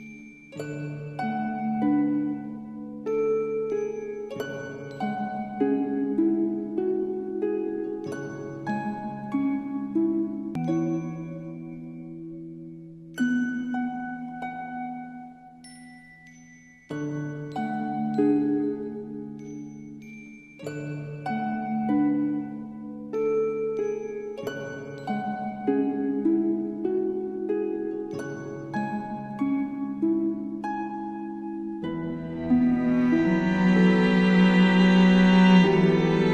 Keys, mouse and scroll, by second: 0.0 click, 0.8 space, 1.0 click, 1.3-1.7 space, 1.9 alt+scroll up 1, 2.7 space, 2.8-3.9 click, 3.2 space, 4.0-4.4 alt+scroll up 2, 4.5-5.8 drag, 6.9 alt+scroll down 1, 7.7 click, 8.2 space, 8.3 click, 9.0-9.4 alt+scroll up 1, 9.8 space, 9.9-10.5 click, 10.4 space, 10.5 alt+scroll down 1, 11.1 click, 11.2 alt+scroll down 1, 11.4 space, 11.4-11.7 click, 11.5 space, 12.2 click, 12.6-14.7 typing, 12.7 click, 12.9 click, 13.3 click, 13.5 click, 13.9 click, 14.1 click, 14.6 click, 15.1 click, 15.8 click, 16.2-20.4 typing, 16.4 click, 17.4 click, 17.8 alt+scroll down 1, 17.9 click, 18.3 click, 18.7 click, 18.9 alt+scroll up 1, 18.9 click, 19.5 alt+scroll down 1, 19.8 click, 20.0 click, 20.6 click, 20.7-21.0 scroll down 2, 29.5 click, 32.0-32.6 alt+scroll down 3, 32.6 space, 32.7 click, 33.1-33.9 space, 34.2 alt+scroll down 1, 36.2 click.